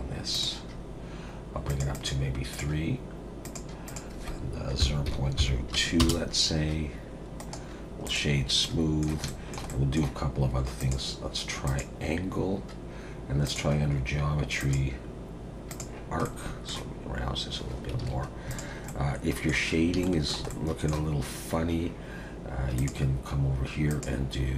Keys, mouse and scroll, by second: 1.7 click, 1.9 click, 2.5 click, 3.4 click, 3.8 click, 7.4 right click, 8.4 scroll up 4, 8.6 middle click, 9.2 shift+middle click, 9.7 middle click, 10.8 click, 13.5 click, 13.8-14.6 scroll down 4, 14.6 click, 16.2 middle click, 17.6-17.9 scroll down 2, 18.0 alt+a, 18.5 click, 18.9 middle click, 19.7 scroll down 2, 20.0 shift+middle click, 20.5 middle click, 22.8 click, 23.9 click.